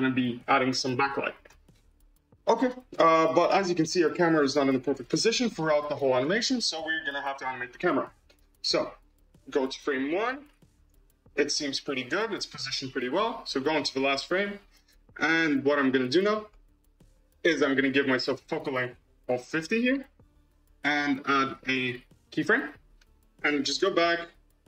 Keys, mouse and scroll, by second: 0.1-1.4 middle drag, 1.4 KP_0, 4.9 click, 6.0 click, 6.9 click, 7.9-10.3 drag, 16.5-18.2 scroll up 3, 18.2-20.1 drag, 22.3 click, 23.2 click, 23.9 m.